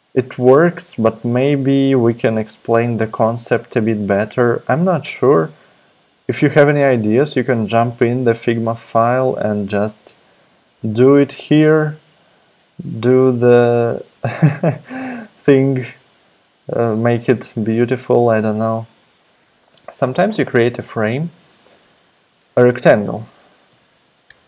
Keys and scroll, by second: 17.4 super+Tab, 22.5 alt+BackSpace, 22.6-24.4 typing.